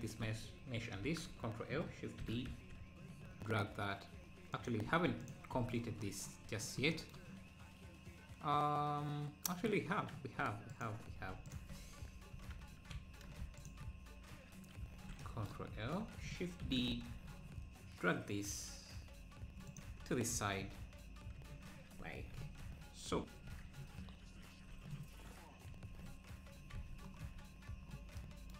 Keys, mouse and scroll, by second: 1.0 ctrl+l, 2.2 shift+d, 5.3 x, 6.5-6.9 scroll up 1, 10.8 click, 11.5 shift+click, 12.6 ctrl+l, 13.7 shift+click, 14.8 ctrl+l, 15.7 `, 16.6 shift+d, 20.1 KP_7, 21.3 KP_Decimal, 22.5 z, 23.0 scroll up 1, 23.6 z, 23.8 scroll down 1, 24.7 Tab.